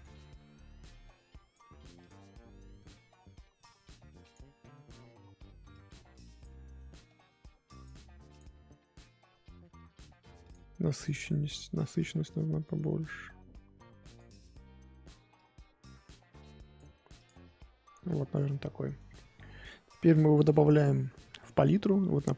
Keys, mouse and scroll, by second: 2.1-5.7 drag, 8.4-10.5 drag, 17.3 click, 17.8 scroll down 3, 18.0-22.3 middle drag.